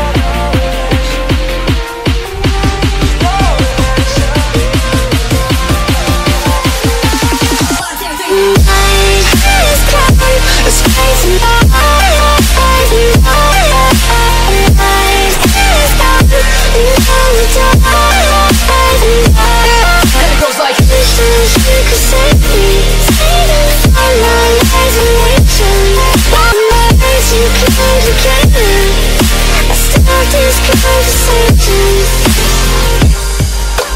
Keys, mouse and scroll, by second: 2.7 click, 9.8 click, 10.8 click, 15.5 click, 16.0 click, 17.4 click, 18.3 click, 19.3 ctrl+click, 19.4 ctrl+click, 22.4 click, 23.3 click, 25.4 click, 26.4 click, 27.6 click, 28.8 click, 31.8 click, 32.3 click, 33.1 click.